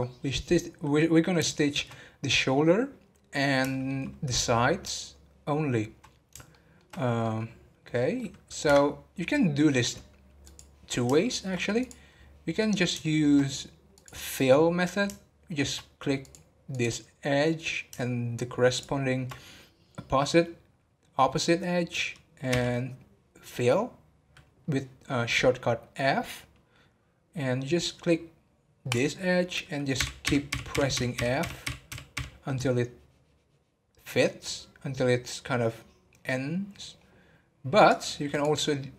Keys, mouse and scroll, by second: 11.8 click, 12.1 scroll up 4, 12.5 scroll down 2, 13.0-38.9 shift+middle drag.